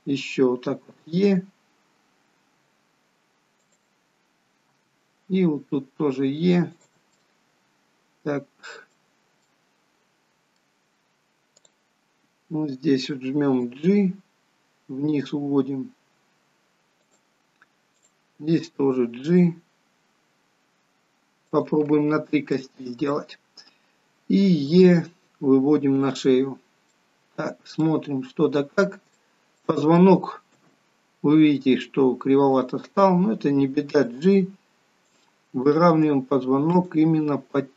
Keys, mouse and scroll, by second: 1.0 e, 7.3 middle click, 9.6 middle click, 11.8 click, 13.9 g, 18.1 click, 18.5 g, 22.7 middle click, 25.1 e, 26.8-27.1 scroll down 3, 27.1 middle click, 28.3 scroll up 3, 28.8-29.3 scroll down 1, 29.4 shift+middle click, 30.0 middle click, 30.7 KP_3, 32.7 click, 34.2 g, 35.9 click, 36.1 g.